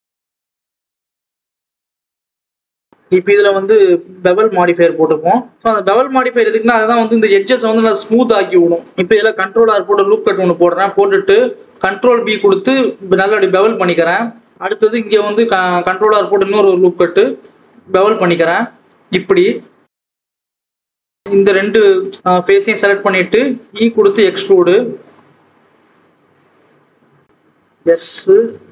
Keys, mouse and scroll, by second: 2.8 click, 3.1-3.7 scroll up 1, 4.2-5.8 drag, 5.8 KP_0, 6.8 click, 7.0-7.4 scroll down 1, 7.5 Tab, 7.8 right click, 7.9-8.5 scroll up 1, 8.5 click, 8.8 Tab, 9.6 ctrl+r, 14.5 alt+a, 15.2 ctrl+r, 20.2 click, 22.7 e, 25.0-25.5 scroll down 5, 25.6-26.2 scroll up 4, 26.2 g, 27.6 s.